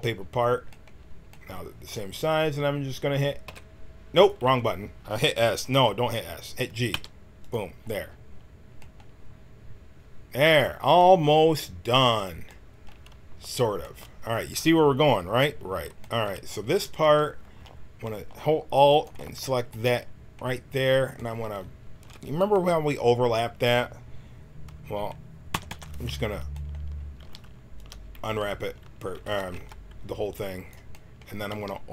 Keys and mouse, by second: 3.4 s, 6.9 g, 17.0 a, 18.9-21.6 drag, 25.5 u, 25.6 u, 27.2 g, 29.2 a, 29.5 b, 31.5 g.